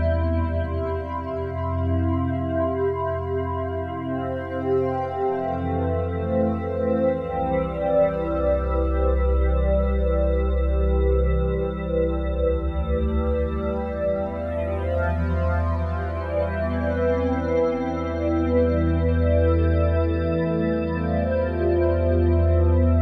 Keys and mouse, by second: 1.4 g, 3.7 click, 4.6 r, 4.9 x, 5.0 x, 5.9 Escape, 6.6 r, 6.8 x, 7.3 Escape, 7.9 r, 8.2 z, 8.3 z, 9.6-13.9 drag, 10.9 typing, 13.9 typing, 15.0-22.5 drag, 22.5 g.